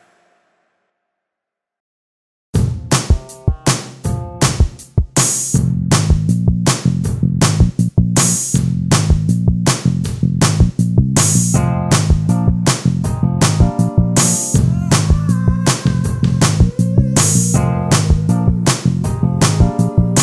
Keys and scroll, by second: 2.7 space, 4.5 space, 7.7 space, 9.8 ctrl+space, 12.4 space, 13.6 ctrl+space.